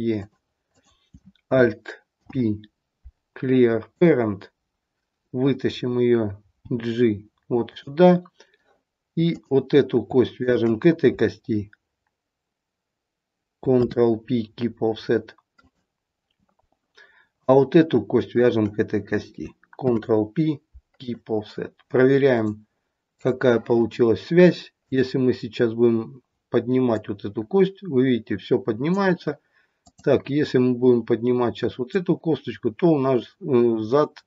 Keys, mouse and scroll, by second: 0.6 click, 2.1 alt+p, 6.6 g, 9.3 click, 10.4 shift+click, 13.6 ctrl+p, 17.3 click, 18.3 shift+click, 19.8 ctrl+p, 22.2 click, 24.8 click, 25.9 scroll down 2, 26.8 click, 29.9 click.